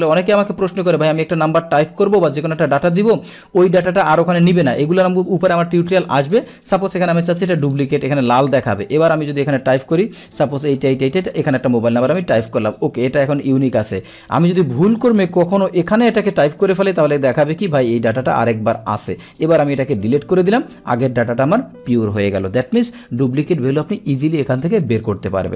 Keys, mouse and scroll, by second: 1.2 click, 2.8-3.2 drag, 6.3 click, 6.8 click, 7.6 click, 8.8 click, 12.1 click, 12.8 click, 13.8 ctrl+c, 14.3 Down, 14.7 Down, 16.0 ctrl+v, 19.3 click, 20.2 Delete, 20.2 click, 20.3 Delete, 21.5 click.